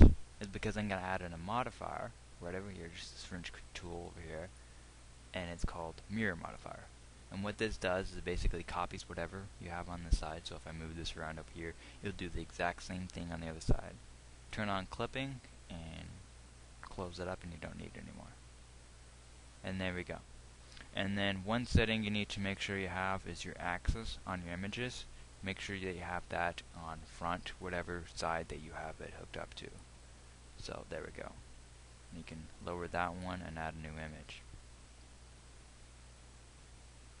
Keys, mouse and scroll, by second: 4.6-6.5 drag.